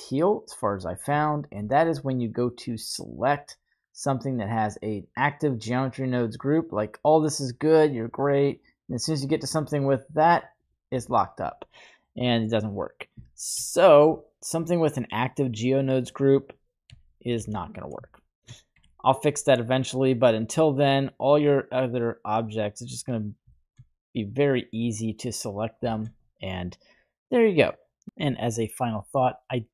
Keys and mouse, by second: 1.2-1.6 shift+middle drag, 2.9 middle click, 12.0-12.7 middle drag, 13.2-13.5 shift+middle drag, 14.1-16.9 right drag, 16.9 h, 17.2 right click, 17.4 h, 18.1-18.5 shift+middle drag, 18.7 y, 23.6 shift+middle click, 25.3 right click, 25.8 shift+middle click, 28.9-29.7 middle drag.